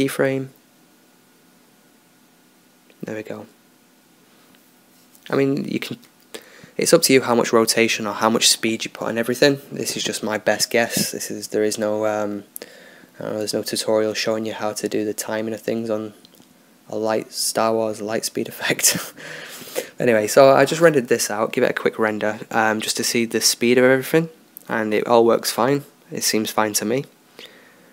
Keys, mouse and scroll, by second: 1.2-4.4 drag, 7.7-10.1 drag, 9.3 right click, 10.1-11.1 middle drag, 12.7-17.1 drag, 19.1 click, 20.3-24.7 middle drag, 27.5-27.9 right drag.